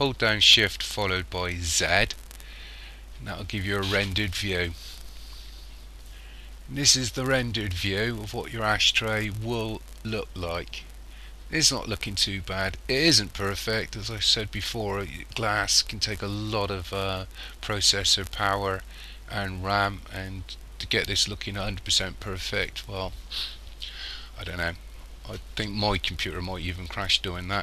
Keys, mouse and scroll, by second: 1.8 shift+z.